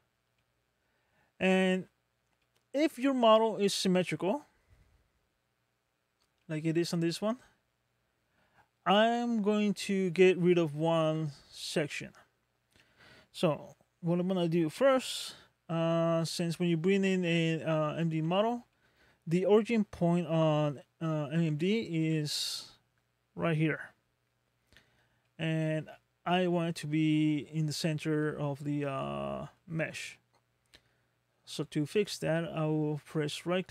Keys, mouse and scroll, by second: 0.4 middle click, 2.4 middle click, 6.5 middle click, 15.8 scroll down 2, 16.5 middle click, 18.7 shift+middle click, 19.6 middle click, 21.1-21.5 scroll down 1, 21.5 middle click, 22.1 scroll down 2, 24.7 scroll up 3, 25.3 middle click, 25.9 shift+middle click, 28.3 middle click, 29.0 shift+middle click, 31.9 right click.